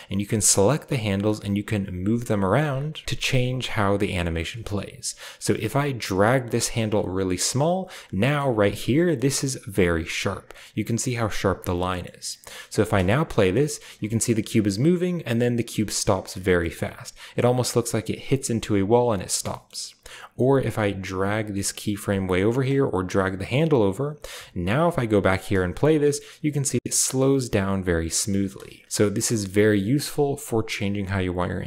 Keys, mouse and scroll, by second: 7.9-9.0 scroll up 2, 8.4-11.3 middle drag, 9.0-10.1 scroll up 1, 10.1-11.3 scroll up 1, 11.4-13.5 scroll down 2, 11.7-15.6 middle drag, 12.7 space, 13.7-14.3 shift+scroll up 2, 14.3-16.1 shift+scroll down 2, 16.5 shift+middle click, 16.5-17.4 shift+scroll down 1, 17.2-18.4 shift+drag, 18.6 click, 19.2 space, 19.4-20.7 middle drag, 20.7-25.9 drag, 26.5 space, 28.0-29.7 middle drag, 28.2 space, 28.8 click, 31.4-31.6 scroll down 1, 31.5-31.6 middle drag.